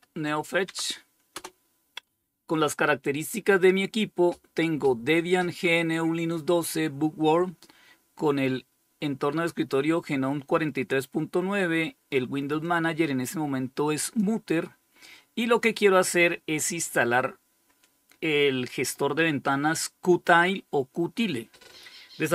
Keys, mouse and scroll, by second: 0.5 Return, 11.8-13.4 drag.